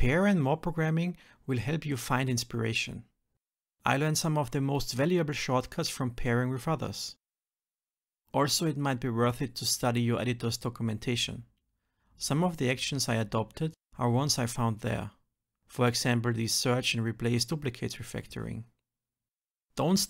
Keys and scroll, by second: 0.1 shift+F10, 4.0 ctrl+shift+Left, 4.4 Return, 4.9 shift+F10, 5.9 alt+Delete, 6.9 shift+F10, 8.4 alt+Return.